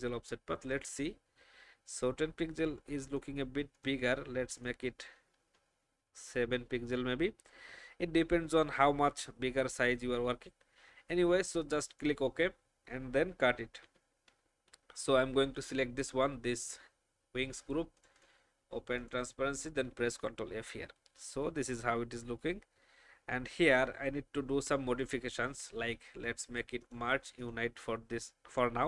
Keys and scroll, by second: 13.8 ctrl+x, 19.9 ctrl+f.